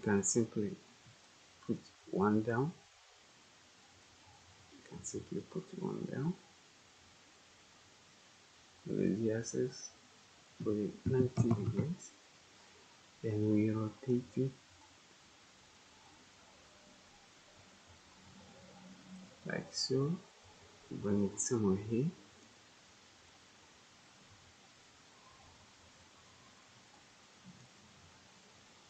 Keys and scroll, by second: 11.0-11.4 typing, 11.6 Return.